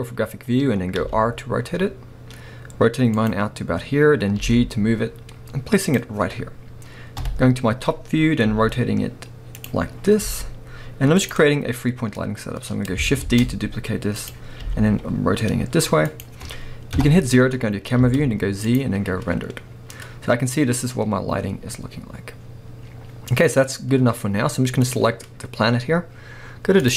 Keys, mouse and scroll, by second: 4.4 g, 6.0 click, 7.2 KP_7, 8.0-8.5 scroll down 1, 8.5 r, 9.7 click, 9.9-10.2 scroll up 1, 10.2 g, 11.3 click, 13.3 shift+d, 14.3 click, 14.6 r, 16.2 click, 17.0 KP_0, 17.7-18.0 scroll up 1, 18.0 z, 19.7 scroll up 1, 21.0-21.4 scroll down 1, 22.9-23.8 scroll up 1, 25.0 click.